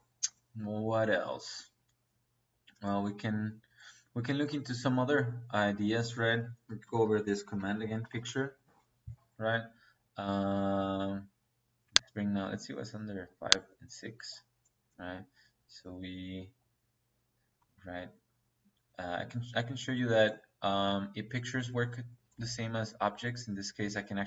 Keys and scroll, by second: 6.7 Escape, 7.4 p, 7.5 i, 7.8 c, 7.9 t, 8.5 Return.